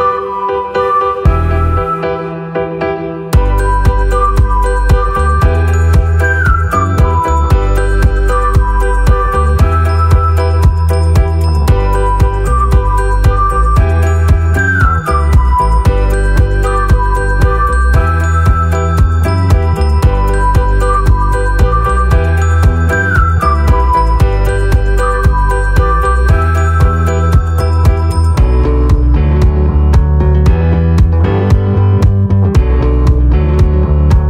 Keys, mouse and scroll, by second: 0.5 click, 1.6 middle click, 2.3 c, 2.8 space.